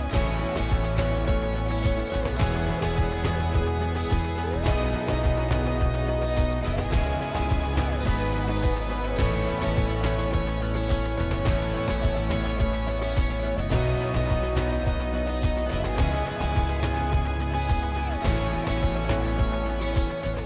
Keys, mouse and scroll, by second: 0.9 right click, 0.9 w, 2.9 click.